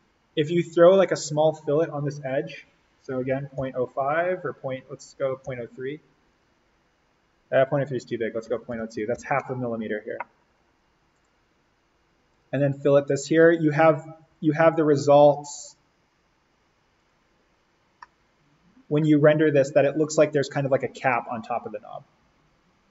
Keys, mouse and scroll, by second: 3.2-3.6 typing, 5.4 3, 6.2 click, 8.1-9.6 typing, 11.1 click, 17.6 click, 17.9-19.7 middle drag, 19.7 click, 20.9-21.2 scroll up 1, 21.2-22.9 middle drag.